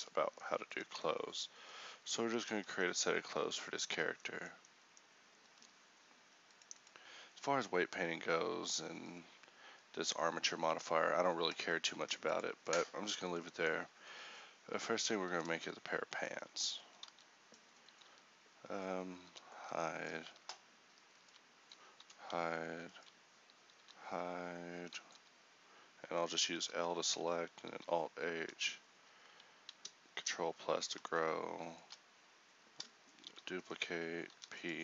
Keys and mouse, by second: 0.0 h, 3.9 Tab, 5.6 Tab, 14.8 Tab, 17.2 z, 19.4 h, 22.1 h, 23.9 j, 25.2 h, 26.6 l, 27.8 alt+h, 30.2 ctrl+n, 34.4 shift+p.